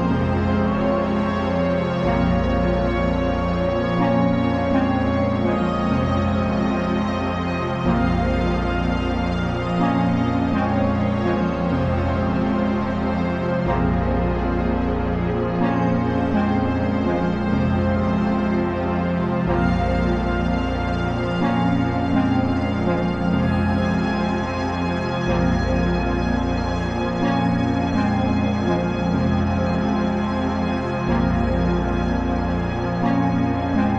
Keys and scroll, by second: 5.9 ctrl+t, 12.3 Return.